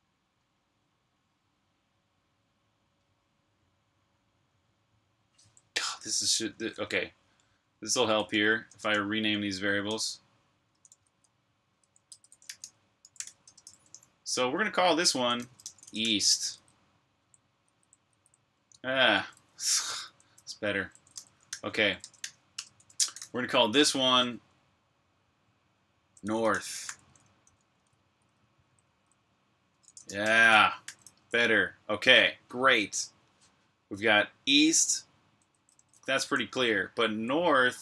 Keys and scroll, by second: 6.3 Escape, 6.5 typing, 7.8-13.5 typing, 14.9-19.9 typing, 21.6-23.0 typing, 25.0-30.8 typing, 35.0-37.8 typing.